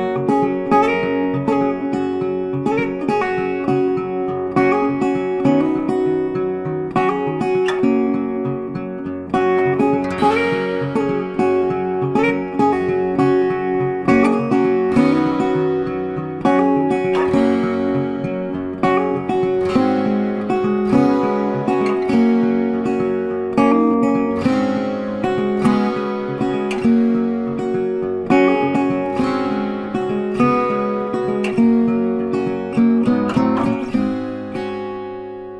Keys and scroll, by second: 22.0 Delete, 23.8 ctrl+d.